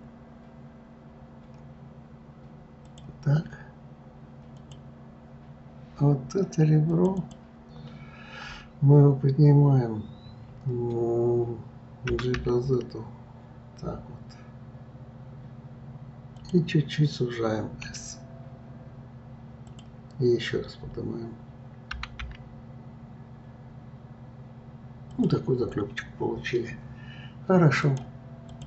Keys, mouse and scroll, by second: 4.5 click, 6.9 click, 7.2 click, 25.6-27.4 scroll down 10, 27.8-28.6 drag.